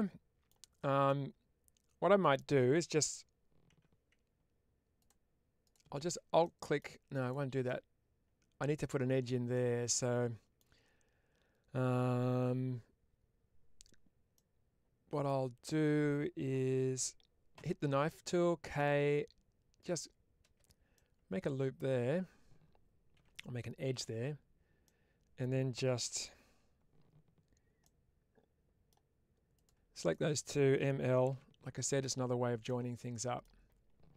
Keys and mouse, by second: 0.9-2.2 middle drag, 6.3 middle click, 7.1 click, 7.5-8.7 middle drag, 9.5 middle click, 14.2 middle click, 20.8 middle click, 23.0 1, 23.8 click, 24.7 middle click, 27.7-28.7 middle drag, 29.4 click, 31.9-33.3 middle drag.